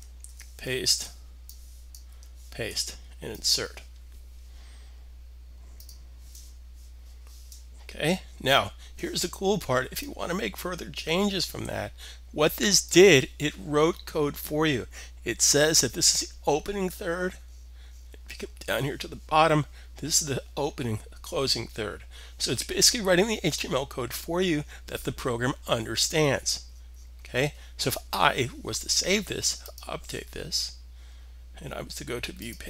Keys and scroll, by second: 0.1 super+v, 1.9 super+v.